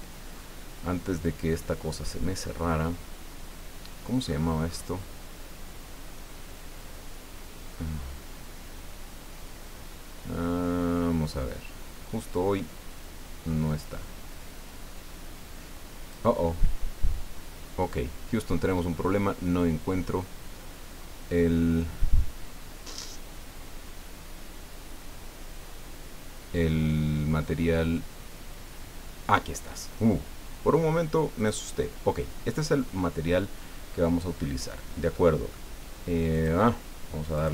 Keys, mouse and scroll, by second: 4.2-5.0 scroll up 4, 6.8-16.3 drag, 17.1-19.0 scroll down 7, 19.4-20.6 scroll down 4, 21.3 scroll down 2, 22.2-23.8 scroll down 6, 24.4-25.4 scroll down 4, 26.2-28.5 scroll down 8, 29.0 scroll down 2, 31.4 click, 35.2 click, 36.3 click, 37.4 click.